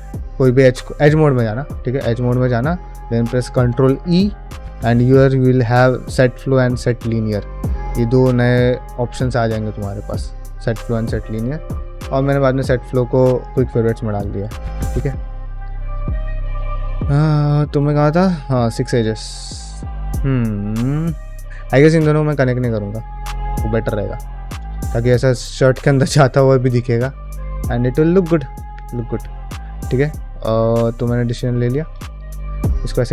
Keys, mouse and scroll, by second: 0.7 2, 13.2 middle click, 13.5 ctrl+Tab, 14.1 shift+middle drag, 14.4 ctrl+middle drag, 14.7-15.4 middle drag, 15.7 ctrl+middle click, 15.9 shift+middle click, 16.2-16.8 middle drag, 17.1 click, 17.4 middle drag, 17.8 ctrl+middle drag, 18.4-21.5 ctrl+middle drag, 22.3 drag, 22.7 middle drag, 23.1 ctrl+middle click, 23.5 shift+middle click, 23.7 middle drag, 24.3 ctrl+middle click, 24.5 middle click, 25.3-28.5 middle drag, 28.8 click, 29.0 q, 31.0 shift+middle click, 31.4 click, 31.7 ctrl+middle click, 31.9 shift+middle click, 32.3-33.0 middle drag.